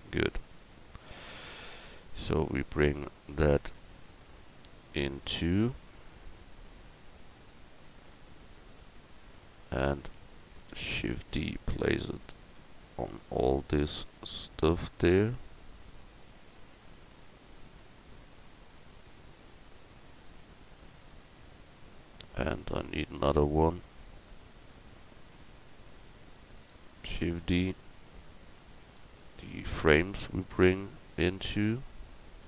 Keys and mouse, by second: 0.3 Tab, 1.9 l, 8.7 middle click, 11.1 shift+d, 18.8 shift+d, 19.5-22.0 drag, 22.4-25.6 middle drag, 27.1 shift+d, 28.0-29.4 drag, 29.4 Tab, 29.8 Tab, 30.9 Tab, 32.0-32.4 right drag.